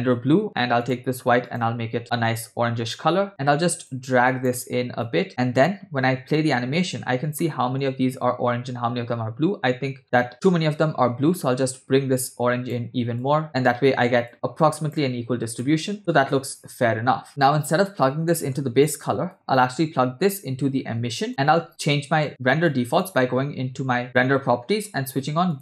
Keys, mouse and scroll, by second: 0.8 click, 1.5 click, 3.9-4.5 drag, 5.1 click, 6.2 space, 7.0 space, 7.4 middle click, 7.9-8.5 scroll down 1, 10.0 scroll up 1, 10.3-12.9 drag, 13.2 click, 14.3 click, 15.3 scroll down 1, 15.6 middle click, 16.0 space, 17.9-18.2 scroll down 2, 18.3 middle click, 19.3-21.3 drag, 22.2 shift+middle click, 22.7-23.8 drag, 24.1 click.